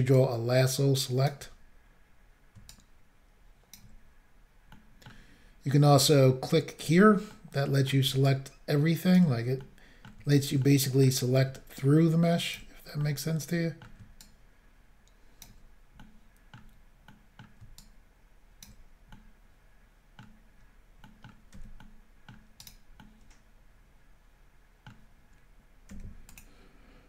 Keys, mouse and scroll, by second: 0.2 ctrl+right click, 2.7 ctrl+right click, 4.8 middle click, 6.8 click, 7.3 middle click, 8.3 ctrl+right click, 9.6 middle click, 10.6 middle click, 11.8 ctrl+right click, 13.0 middle click, 14.2 ctrl+right click, 16.0 middle click, 17.1 middle click, 17.8 ctrl+right click, 20.2 middle click, 21.0 middle click, 21.8 middle click, 22.6 right click, 23.0 middle click, 25.9 c, 26.4 click.